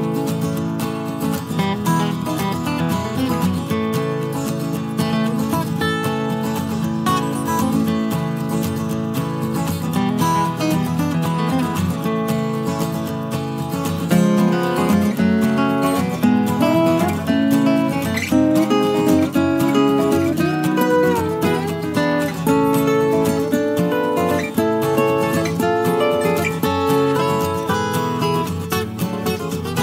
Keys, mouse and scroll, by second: 1.6 shift+F6, 3.6 click, 5.4 KP_Add, 9.7 KP_Add, 10.3 space, 12.1 click, 14.1 click, 16.1 click, 16.9 click, 20.0 space, 22.9 click, 24.7 click, 26.3 click, 26.9 KP_Subtract, 27.8 space, 29.1-29.8 drag.